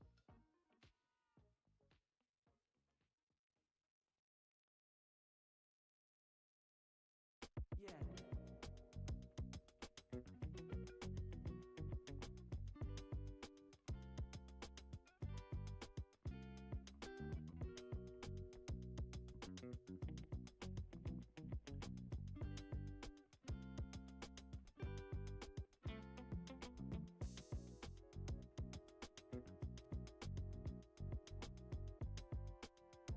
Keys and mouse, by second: 0.1 middle click, 0.5 g, 3.0 e, 5.8 click, 6.4 alt+shift+click, 6.8 alt+shift+click, 7.7 alt+e, 11.0 ctrl+z, 11.6 alt+e, 15.4 Tab, 16.0-17.3 middle drag, 18.3-18.9 middle drag, 19.8-20.1 middle drag, 20.4 Tab, 23.2 click, 23.7 alt+shift+click, 24.0 alt+shift+click, 25.5 alt+shift+click, 27.3-28.0 drag, 28.5 shift+d, 30.0 p, 31.0 Tab, 31.5 click, 32.3 g.